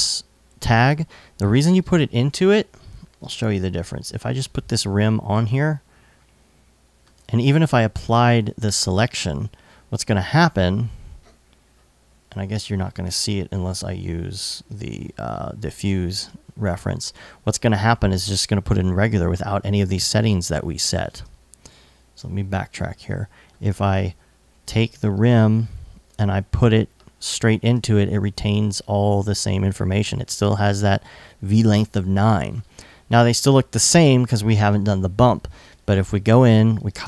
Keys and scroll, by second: 20.4 super+z, 36.5 super+c.